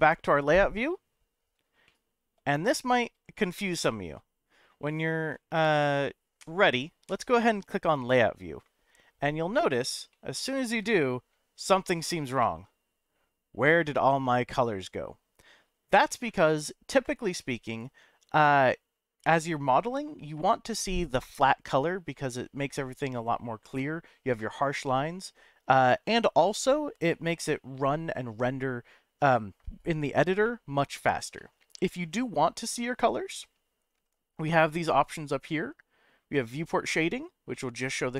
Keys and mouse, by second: 0.0 click, 1.8-2.5 shift+middle drag, 10.1-10.7 shift+middle drag, 30.5-32.6 middle drag, 36.3 click, 37.5-38.1 middle drag.